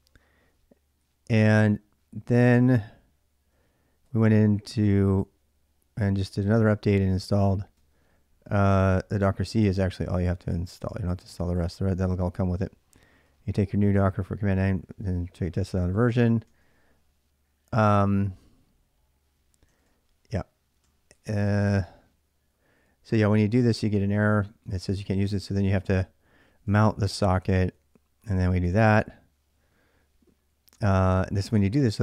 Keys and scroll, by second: 0.8-11.1 typing, 11.1 ctrl+[, 11.3 ctrl+j, 13.0-16.7 typing, 19.4-32.0 typing.